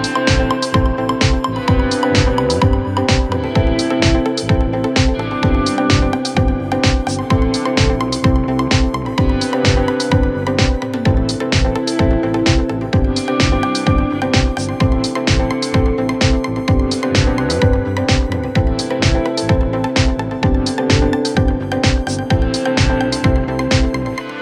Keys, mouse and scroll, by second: 6.3 ctrl+t, 6.9-7.9 drag, 10.0-11.0 alt+scroll down 1, 12.3-13.3 alt+scroll up 1, 14.1 click, 15.1 click, 17.8-23.1 drag.